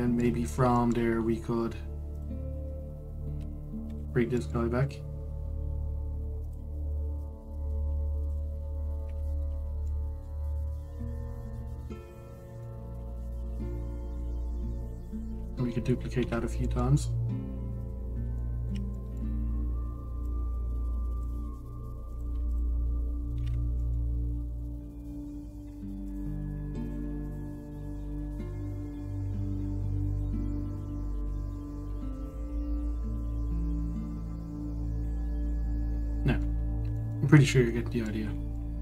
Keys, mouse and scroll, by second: 0.0-1.1 shift+middle drag, 1.1-1.4 scroll, 1.4-2.8 shift+middle drag, 2.8 click, 4.5 shift+d, 7.9 click, 9.7 KP_Decimal, 10.5-12.0 middle drag, 12.0 click, 13.0 click, 13.3-14.1 middle drag, 14.1 scroll down 1, 14.4-15.5 middle drag, 15.5 shift+drag, 15.8 shift+drag, 16.9 shift+d, 18.8-19.1 scroll, 19.1-20.9 shift+middle drag, 20.9 click, 22.8 click, 23.2 shift+click, 24.0 shift+d, 27.5 drag, 27.9 shift+click, 28.7 shift+d, 31.5 ctrl+z, 31.8 ctrl+z, 32.9 shift+click, 33.9 click, 35.9 scroll down 1, 36.2-37.3 middle drag, 37.3-37.6 scroll up 1, 37.6-38.8 shift+middle drag.